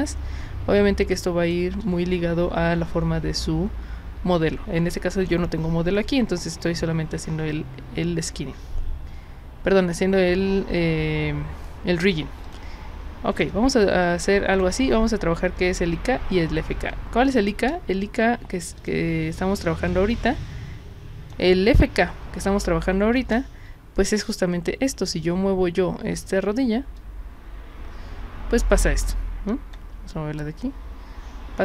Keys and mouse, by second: 0.1-1.5 drag, 12.4 click, 13.5-14.2 drag, 14.6 click, 16.9-17.3 alt+drag, 17.7 space, 18.8 click, 19.9-21.3 drag, 22.4-23.1 drag, 24.2 click, 27.0-29.7 drag, 30.4-31.6 drag.